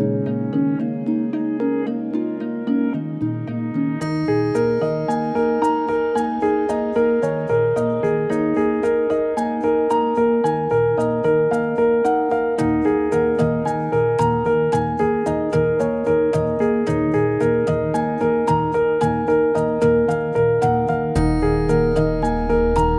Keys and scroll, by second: 3.1 ctrl+z.